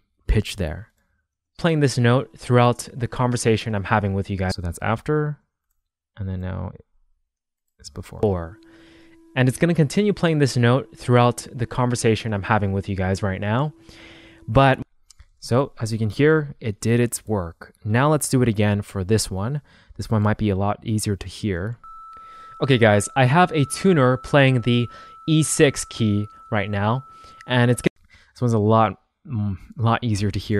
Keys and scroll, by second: 1.4 space, 4.3 space, 5.1 super+z, 8.0 space, 14.6 space, 15.3 shift+super+z, 21.6 space, 27.7 space.